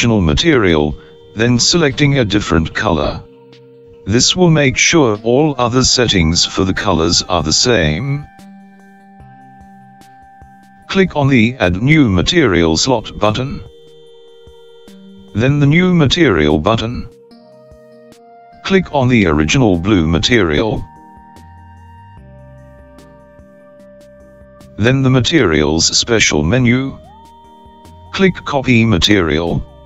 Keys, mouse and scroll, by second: 13.7 click, 16.9 click, 19.5-24.7 drag, 26.8-29.8 drag.